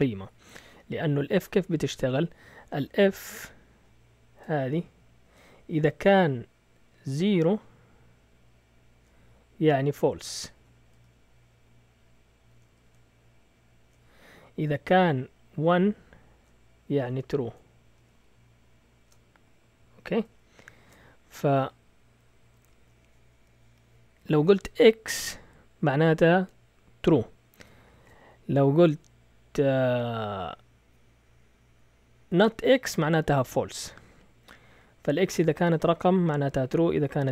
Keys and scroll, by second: 20.7 shift+super+z, 27.9 shift+super+z.